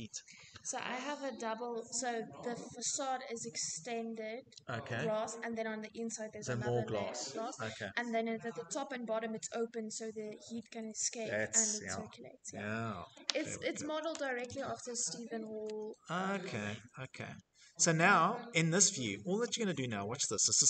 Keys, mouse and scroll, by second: 12.8-14.5 scroll, 16.0-18.1 scroll, 18.7 middle click, 19.8 click.